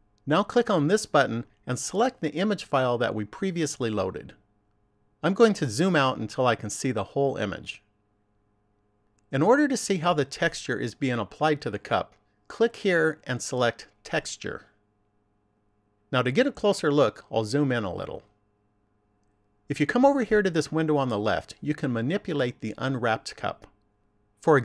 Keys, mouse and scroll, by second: 4.4 click, 12.6 click, 17.4-17.9 scroll up 2.